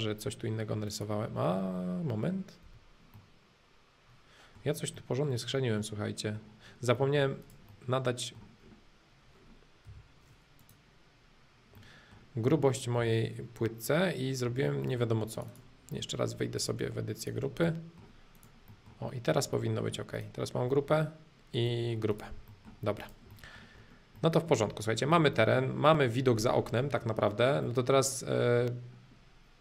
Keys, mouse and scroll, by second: 0.9-2.9 drag, 3.1-5.1 middle drag, 6.6 scroll up 2, 6.9 middle click, 7.4 click, 7.7-8.7 middle drag, 8.7-9.2 scroll up 2, 9.2 scroll up 1, 9.4-9.8 scroll down 2, 9.8 m, 10.6-11.7 drag, 11.7-13.7 middle drag, 14.4 space, 14.8 middle click, 15.3-16.3 drag, 16.3 p, 16.6-17.6 drag, 17.6 middle click, 18.3 click, 18.7-20.1 middle drag, 20.1 click, 20.7-22.1 middle drag, 22.1 click, 22.5 middle click, 23.0 click, 23.3 middle click, 24.1 middle click, 24.9-27.4 shift+middle drag, 27.6-29.6 middle drag.